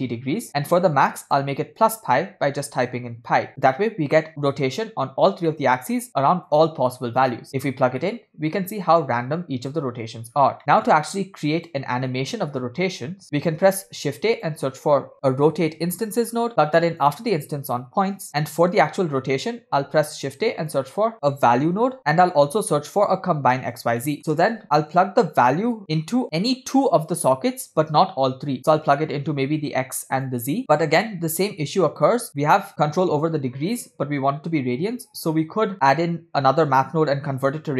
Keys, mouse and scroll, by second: 0.9-3.5 shift+drag, 5.5 middle click, 6.6-7.5 drag, 8.1-9.9 middle drag, 10.4 scroll down 2, 10.6-11.8 drag, 10.6 middle click, 13.2 middle click, 13.2 scroll down 1, 13.8 shift+a, 18.3 click, 18.4-18.9 middle drag, 19.8 shift+a, 22.0 BackSpace, 24.1 middle click, 24.2 shift+a, 26.2-28.5 drag, 29.0 click, 29.1-30.5 drag, 30.6 click, 30.6 scroll down 2, 30.8 middle click, 31.1-31.6 scroll up 4, 32.2 scroll up 3, 32.3 middle click, 35.3-36.0 scroll down 2, 36.0 scroll up 3.